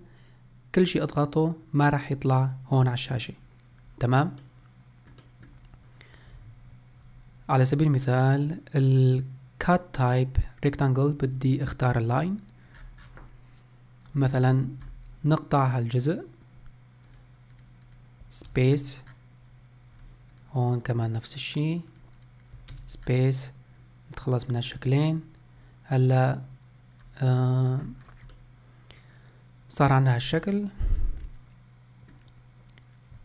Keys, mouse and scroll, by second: 4.4-8.3 shift+middle drag, 27.1-27.4 scroll down 1, 27.4-28.1 middle drag, 28.1 scroll down 1, 28.4-30.2 middle drag, 30.2 scroll up 1, 30.6-33.2 middle drag.